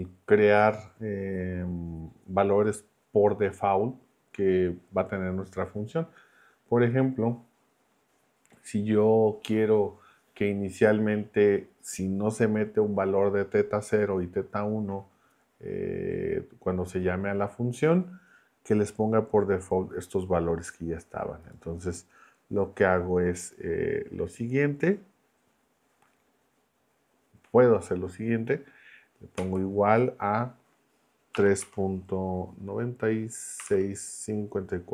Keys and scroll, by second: 29.3 =, 31.3 3, 31.6 ., 33.4-34.9 typing.